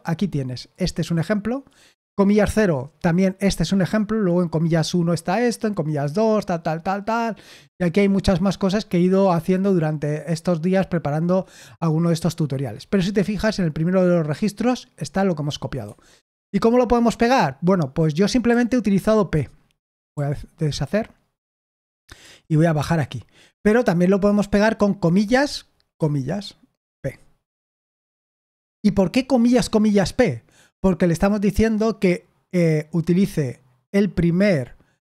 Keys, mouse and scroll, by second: 15.8 Escape, 18.4 p, 20.1 u, 22.1-22.7 typing, 26.8 typing.